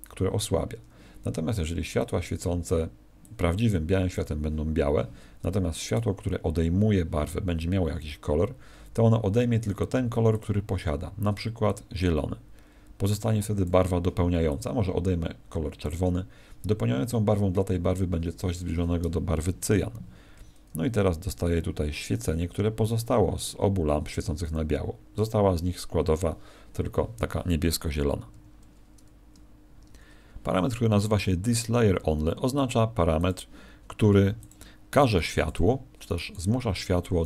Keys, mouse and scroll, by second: 0.7 Escape, 1.9 click, 5.8 right click, 10.3 click, 28.3 Escape, 33.1 click, 34.2 x, 35.1 right click, 35.3 x, 36.0 right click, 36.2 x, 37.1 right click.